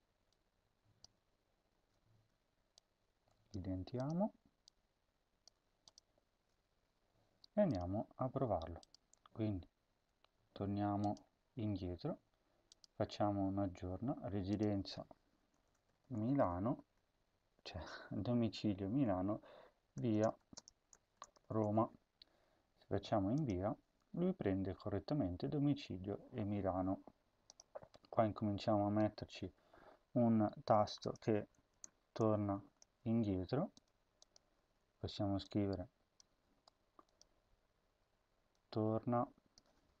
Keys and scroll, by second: 1.0 ctrl+v, 1.6 ctrl+s, 3.4 Tab, 5.4 Tab, 6.1 ctrl+s, 15.3-16.8 typing, 19.7-22.0 typing, 31.6 BackSpace, 32.9 ctrl+c, 36.1 Tab, 36.4 Tab, 39.9-40.0 typing.